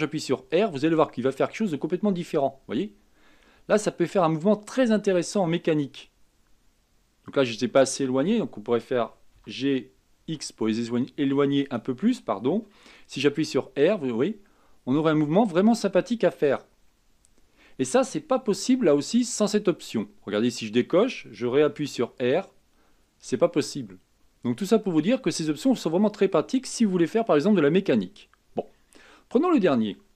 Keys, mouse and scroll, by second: 0.7 r, 9.5 g, 13.3 r, 20.6 click, 22.0 r, 29.0-29.5 scroll down 1, 29.5-30.1 scroll up 2.